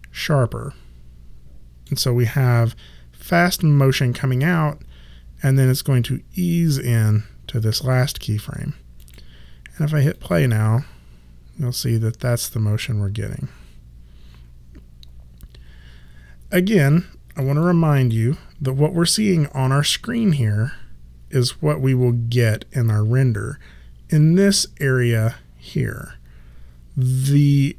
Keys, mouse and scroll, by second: 9.0 click, 17.4 click.